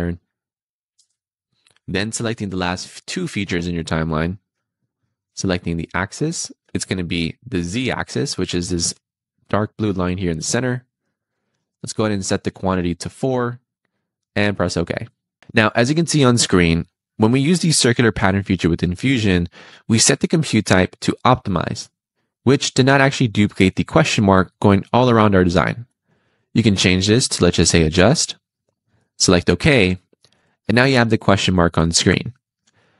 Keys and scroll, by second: 0.8 Return.